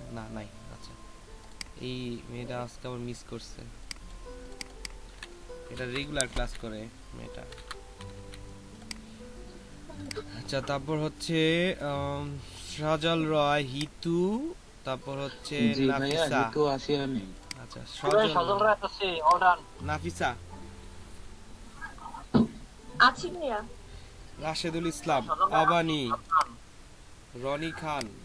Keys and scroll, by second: 5.8 BackSpace, 6.4 shift+a, 7.5 BackSpace, 8.1 a.